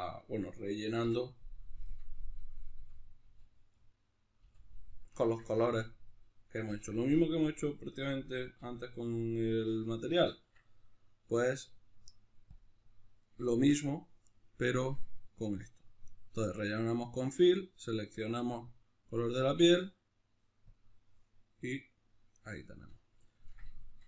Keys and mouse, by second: 0.2 right click, 1.0 l, 1.8 middle click, 2.8 l, 3.8-18.7 middle drag, 4.4 l, 6.6 l, 7.4 l, 12.6 Tab, 18.7 click, 20.8 click, 21.4-24.0 middle drag.